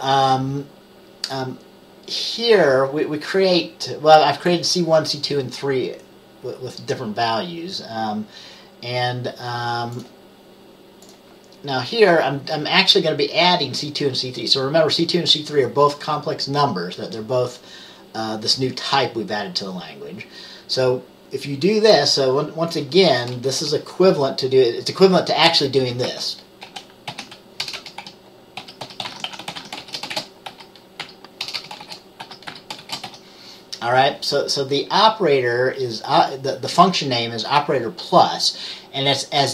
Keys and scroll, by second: 23.7 Return, 29.7-33.2 typing.